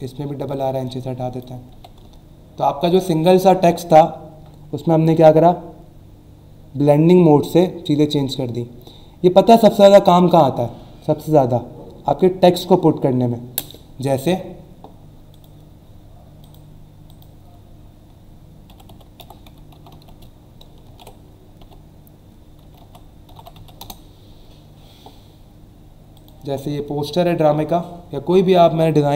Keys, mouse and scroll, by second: 0.5 click, 1.7 v, 2.1 alt+scroll down 1, 2.5 alt+scroll up 1, 15.3 click, 16.4 click, 17.1 click, 18.5-20.1 typing, 20.8 ctrl+a, 21.6-23.5 typing, 23.8 Return, 26.1 click, 28.8 scroll down 1.